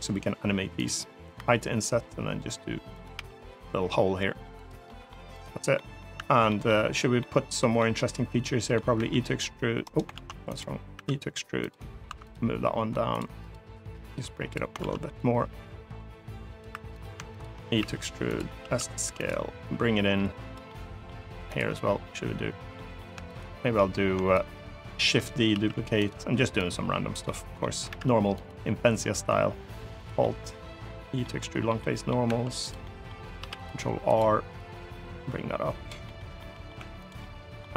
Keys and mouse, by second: 0.5 click, 1.1 i, 2.7 click, 4.1 e, 4.3 click, 4.6 middle click, 5.1 click, 5.5 middle click, 6.2 middle click, 7.0 middle click, 7.6 middle click, 8.7 e, 9.6 right click, 9.9 ctrl+z, 10.3 click, 10.7 e, 11.4 click, 11.8 2, 12.1 click, 13.8 click, 14.6 ctrl+z, 15.0-16.4 drag, 16.5 3, 16.7 click, 17.1 shift+click, 17.6 e, 18.0 click, 18.4 s, 18.9 click, 19.5 click, 20.4 middle click, 21.2 click, 22.5 middle click, 23.1 shift+click, 24.7 shift+d, 25.3 s, 25.8 click, 26.4 click, 27.1 middle click, 27.7 alt+e, 29.7 click, 30.0-31.0 middle drag, 31.2 middle click, 31.6 middle click, 32.0 2, 32.6 middle click, 33.1 ctrl+r, 33.8 click, 34.3-35.7 drag, 35.9 middle click, 36.2 middle click, 36.6 3, 36.8 click, 37.0 middle click.